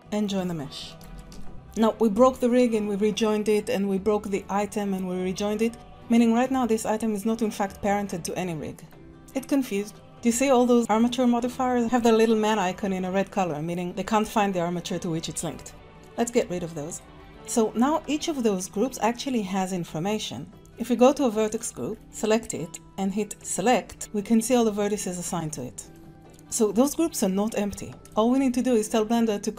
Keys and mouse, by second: 0.6 click, 1.1 shift+drag, 1.4 ctrl+j, 1.5 Tab, 3.6 click, 5.7 ctrl+z, 9.1 click, 16.9 click, 21.4 click, 23.5 click, 24.0 middle click, 25.0 shift+click, 25.5 middle click, 26.1 Tab, 27.0 click, 28.0 ctrl+s, 28.0 click.